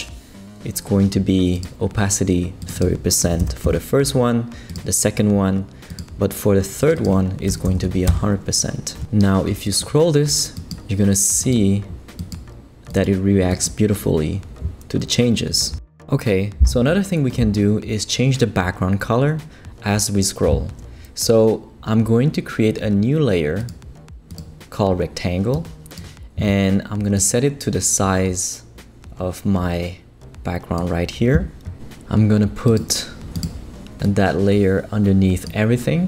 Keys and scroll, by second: 3.0-3.9 typing, 7.2-8.1 typing.